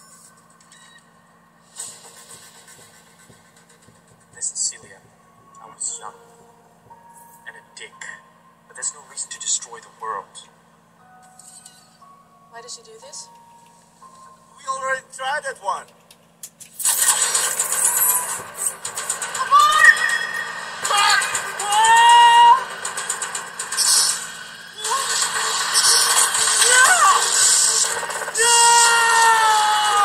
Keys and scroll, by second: 0.0 super+3, 10.0 super+6, 15.4-17.6 typing, 19.1-20.6 typing, 21.9-24.0 typing.